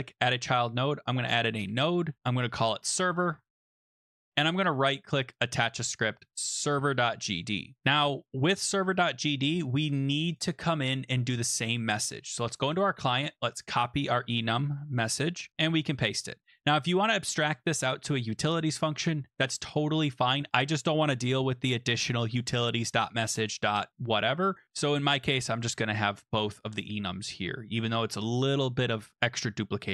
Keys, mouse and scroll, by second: 0.8-1.8 typing, 2.4 click, 2.6 click, 3.3-4.3 typing, 4.4 right click, 5.4 click, 6.7 click, 9.9 click, 10.3 click, 12.5 click, 13.9 click, 14.6 ctrl+c, 15.5 click, 15.7 ctrl+v, 17.0 click.